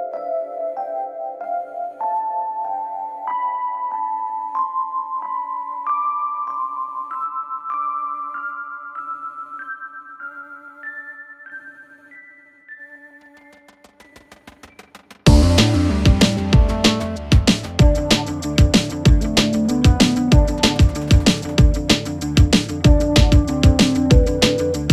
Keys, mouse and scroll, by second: 0.6-2.5 click, 3.3 click, 4.5 click, 5.7 click, 8.5-10.1 typing, 11.4 click, 13.5 click, 16.0 click, 17.5 click, 18.8 Return, 21.3 click, 22.6 click.